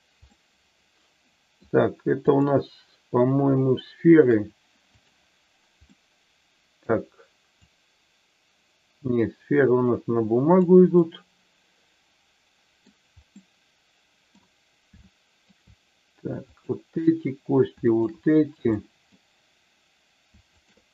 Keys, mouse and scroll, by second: 0.3-1.5 middle drag, 5.9-6.9 middle drag, 7.6-10.5 drag, 10.9-12.9 middle drag, 13.3-14.4 middle drag, 15.0 shift+middle click, 16.5 click, 17.8 shift+click, 18.8 middle click, 20.5 shift+click.